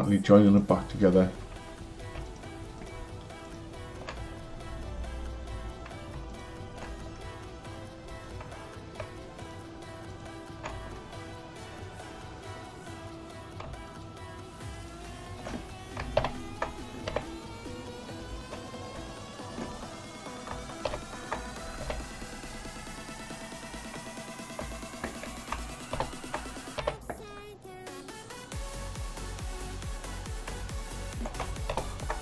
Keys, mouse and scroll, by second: 0.5 click, 2.3 shift+click, 2.8 shift+click, 3.4 shift+click, 6.3 shift+click, 9.4 shift+click, 10.1 shift+click, 13.9 shift+click, 14.7 shift+click, 16.3 ctrl+j, 17.1 h, 18.7 click, 19.1 shift+click, 20.9 ctrl+j, 21.8 h, 22.5 drag, 24.7 shift+click, 26.0 ctrl+j, 26.8 h, 27.2 click, 28.2 click, 30.7 shift+click, 31.8 ctrl+j.